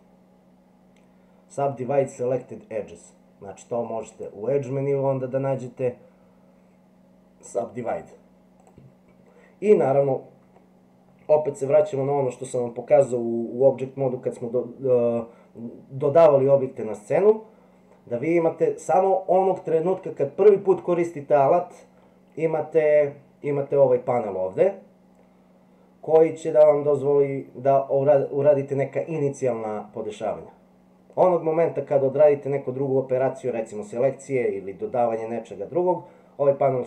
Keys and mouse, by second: 4.1-8.7 drag.